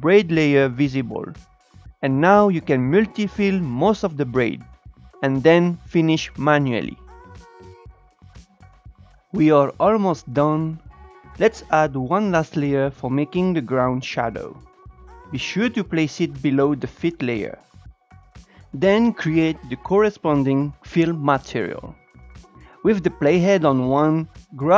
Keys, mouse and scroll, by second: 0.3 click, 0.6 click, 0.8 Up, 2.2 scroll down 2, 2.3 shift+middle click, 2.4 click, 3.1 click, 3.6 b, 3.8 click, 4.1 Up, 4.3 Up, 4.4 click, 4.7 Up, 4.8 click, 5.0 Up, 5.3 click, 5.4 Up, 6.0 click, 6.1 Up, 6.6 click, 6.8-7.4 scroll down 6, 7.0 click, 7.1 shift+middle click, 10.6 click, 11.1-14.4 drag, 16.7 click, 18.3 click, 18.6 scroll down 4, 18.9-21.4 drag, 22.5 Tab, 22.6-23.7 drag.